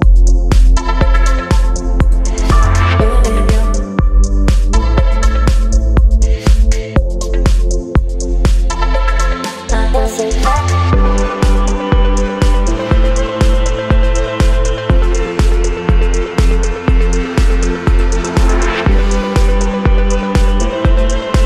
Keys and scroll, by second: 2.1 space, 3.7 space, 4.3 space, 4.8 v, 11.2 Return, 13.1 space, 17.7 Return, 18.2 space, 19.6 Up, 20.6 space.